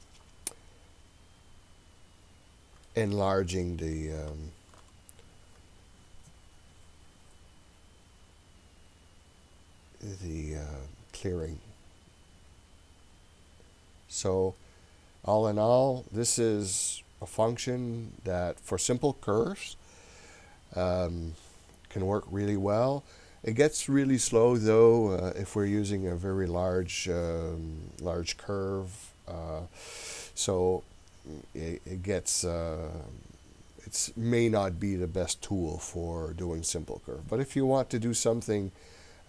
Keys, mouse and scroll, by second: 3.6-4.9 shift+middle drag, 5.4-7.1 scroll up 3, 7.1-7.7 scroll down 1, 8.8-9.3 scroll up 1, 9.3-10.2 scroll up 1, 10.2-11.1 scroll up 1, 11.1-12.5 scroll down 6, 12.5-13.1 scroll down 3, 13.1-13.5 scroll up 2, 13.7-14.6 scroll down 2, 14.6-17.5 middle drag, 17.8 scroll up 1.